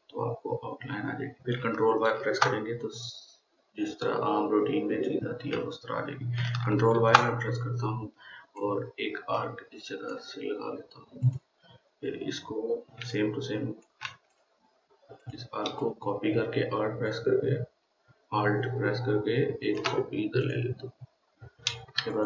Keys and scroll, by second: 2.6 ctrl+y, 7.4 ctrl+y.